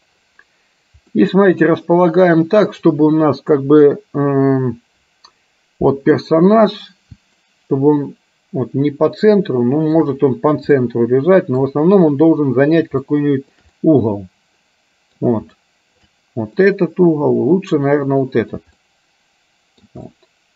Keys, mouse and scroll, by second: 1.3 middle click, 2.3 middle click, 7.5-10.0 shift+middle drag, 10.9 middle click, 13.2 shift+middle click, 13.9-15.4 middle drag, 15.7 shift+middle click, 16.8-18.8 middle drag, 18.9-20.0 shift+middle drag, 20.3 shift+middle click.